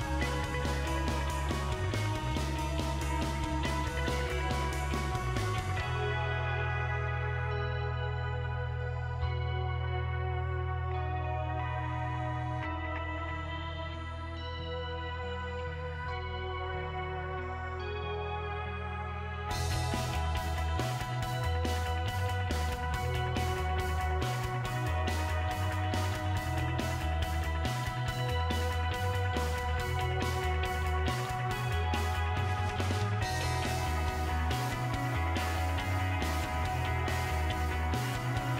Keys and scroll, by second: 27.6 Left, 28.0-28.3 typing, 29.5-33.9 typing.